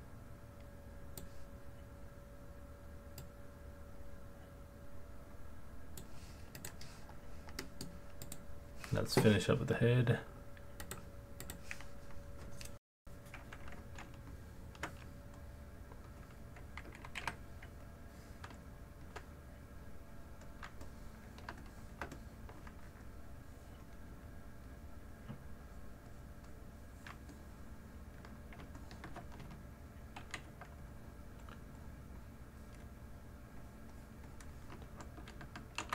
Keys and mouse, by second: 3.2 click, 3.8 click, 6.6 click, 7.6 middle drag, 8.3-9.9 drag, 10.9-11.6 drag, 14.3 ctrl+alt+click, 15.4 middle click, 15.5 alt+click, 17.2 f, 18.6 middle click, 18.7 alt+click, 20.8 alt+click, 21.6 alt+shift+click, 22.1 alt+click, 25.7 click, 26.1 click, 27.4 middle click, 27.4 alt+click, 28.8 ctrl+alt+click, 30.2 alt+q, 30.9 click, 31.8-33.2 drag, 33.6 click, 35.8 ctrl+z.